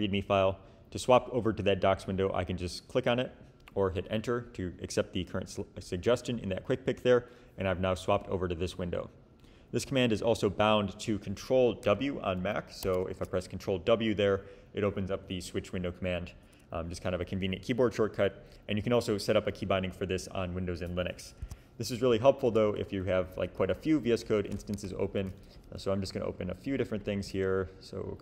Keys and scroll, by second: 12.8 ctrl+w, 21.4 Escape, 22.9 shift+super+n.